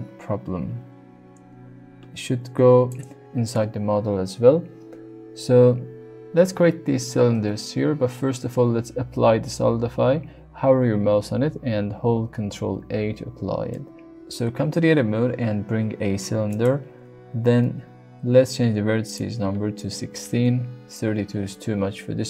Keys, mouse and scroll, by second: 6.2 middle click, 12.5 ctrl+a, 13.7 middle click, 14.6 Tab, 15.0 shift+a, 19.0-21.2 drag.